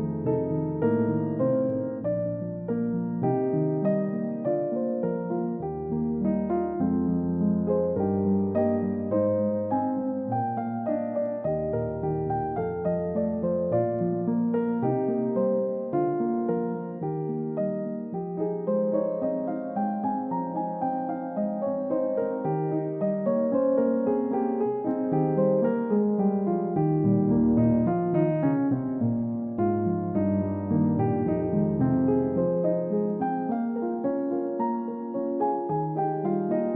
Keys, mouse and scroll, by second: 4.2-5.8 scroll up 1, 5.8-7.3 typing, 20.8 typing, 21.3 Return, 22.1 scroll up 1, 22.2 scroll down 1, 23.2 middle click, 23.5-24.0 scroll up 1, 24.0 double click, 24.2-25.1 scroll up 1, 25.9-26.2 scroll down 1, 26.4 alt+click, 27.8 scroll up 1, 28.1-28.7 scroll down 2, 28.3 middle click, 28.7 middle click, 29.2-30.4 scroll up 1, 32.3 alt+click, 33.3-33.7 scroll down 1, 33.7 middle click, 34.1-34.4 scroll down 1, 34.4 middle click.